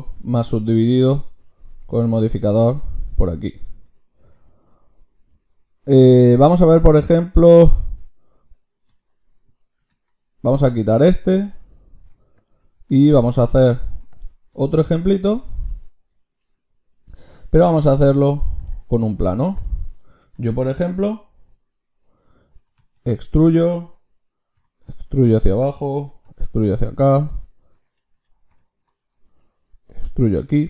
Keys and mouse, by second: 4.2 ctrl+shift+q, 10.5-11.9 drag, 10.5 z, 11.9 x, 13.6 a, 13.9 x, 15.0-16.8 drag, 15.5 shift+a, 18.6 Tab, 22.6 e, 24.5 e, 26.0 e, 28.1 KP_1, 28.5 KP_5, 29.3 e.